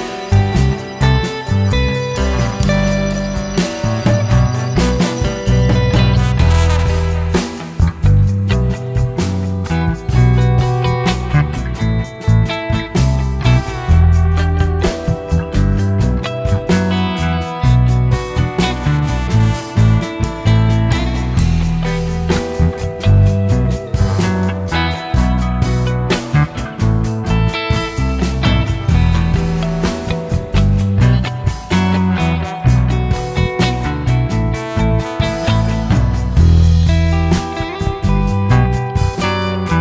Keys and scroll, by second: 1.7 Escape, 2.9 Escape, 3.0 Escape, 3.7 m, 3.8 space, 9.0 Escape, 10.3 Escape, 10.9 e, 11.0 space, 11.5 ctrl+z, 11.7 ctrl+z, 12.2 ctrl+z, 12.2 Escape, 13.5 m, 13.6 space, 17.5 shift+Escape, 18.6 Escape, 20.6 m, 20.7 space, 21.8-22.7 typing, 23.9-29.5 typing, 25.4 Escape, 31.7-34.0 typing, 36.5 shift+Escape, 36.9 shift+Escape, 37.6 m, 37.6 space, 39.7 shift+Escape.